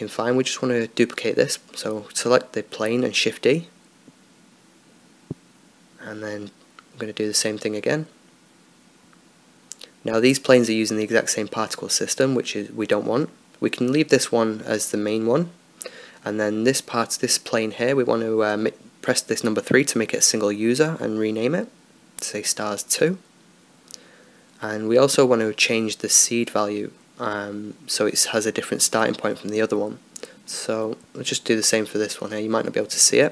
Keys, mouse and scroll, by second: 0.3-3.3 drag, 0.9 Escape, 2.1-5.6 right drag, 3.3 shift+d, 9.2 shift+d, 13.4-14.9 drag, 14.7-17.0 right drag, 16.1-18.5 drag, 17.5-20.6 right drag, 20.6-25.0 drag, 29.1-31.6 drag, 31.6-33.3 middle drag.